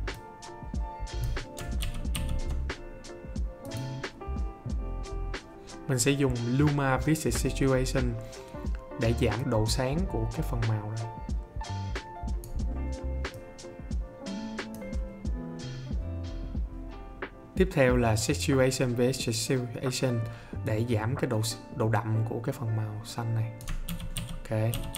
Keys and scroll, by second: 1.8 ctrl+d, 23.8 ctrl+d.